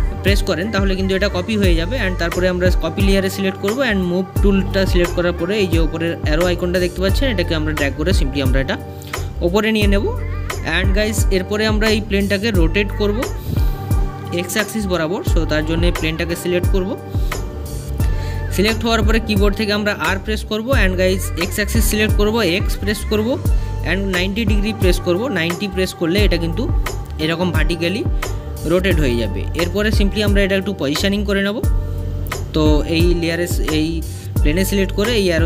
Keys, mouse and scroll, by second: 1.0 click, 5.4-8.5 drag, 8.5-12.6 middle drag, 13.6 click, 14.2 space, 27.2-27.9 scroll down 1, 27.9-28.6 scroll down 1, 28.6-31.1 middle drag, 31.1 click, 32.3 middle click, 33.1 click, 34.6-35.4 drag.